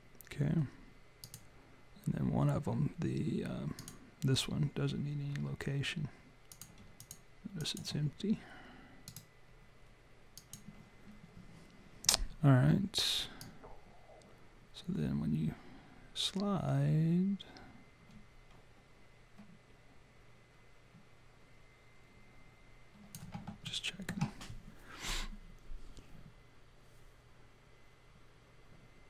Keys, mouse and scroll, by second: 1.2 click, 3.7 click, 5.2 scroll up 4, 6.5 click, 6.5 scroll up 1, 6.9 shift+click, 9.0 right click, 13.4 click, 23.6 alt+middle click, 25.0 click.